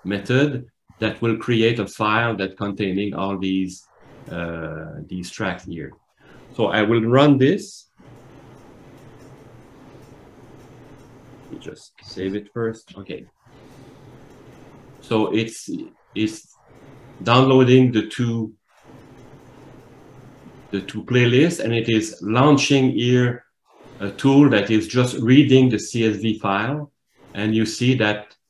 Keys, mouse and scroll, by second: 23.8 click.